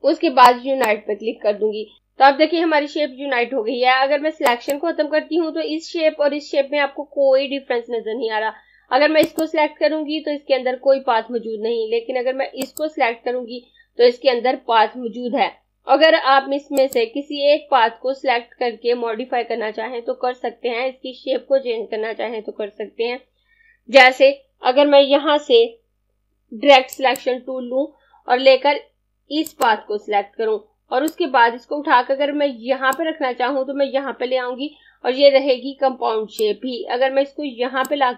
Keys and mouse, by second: 0.4 click, 2.0 click, 4.4 click, 9.0 click, 12.3 click, 16.3 click, 26.2 click, 35.3 click.